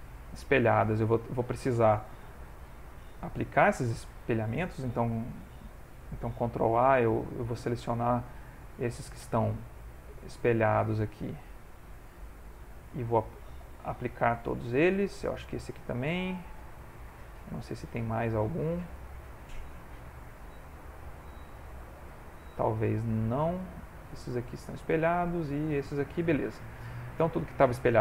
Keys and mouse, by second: 6.5 ctrl+a, 7.6 click, 8.7 ctrl+a, 9.8 click, 10.6 ctrl+Tab, 12.3 click, 13.9 ctrl+a, 15.0 click, 16.1 ctrl+a, 17.3 middle click, 18.2 click, 18.5 middle click, 19.4 click, 20.0 ctrl+Tab, 21.1 click, 23.1 click, 23.1 middle click, 23.7 click, 24.1 middle click, 25.3 click, 25.9 middle click, 26.9 click, 27.4 middle click.